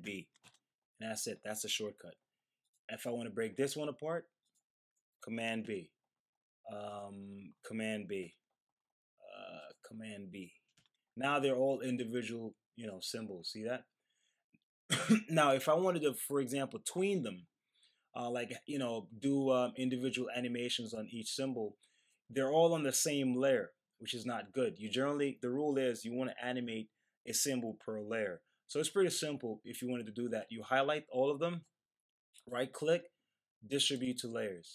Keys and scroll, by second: 0.0 super+b, 0.4 Return, 5.6 super+b, 8.2 super+b, 10.7 super+b.